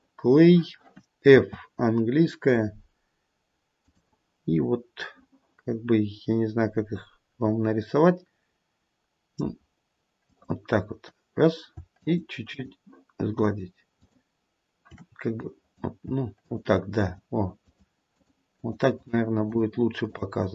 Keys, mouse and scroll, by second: 1.3 f, 6.5-7.4 scroll down 1, 7.4-7.9 scroll down 1, 9.4 scroll up 1, 10.3 click, 12.0 shift+click, 13.2 shift+click, 13.4 shift+click, 13.9 shift+click, 15.4 click, 16.4 shift+click, 16.9 shift+click, 17.6 shift+click, 18.1 shift+click, 18.9 shift+click, 19.4 shift+click, 20.0 shift+click.